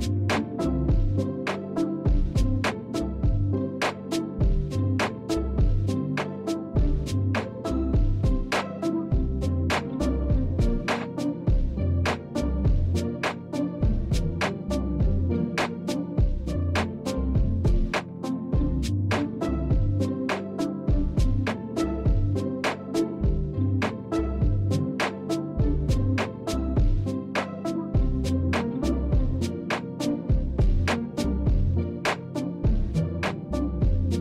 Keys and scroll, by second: 7.3 space, 18.8 ctrl+z, 25.9 space.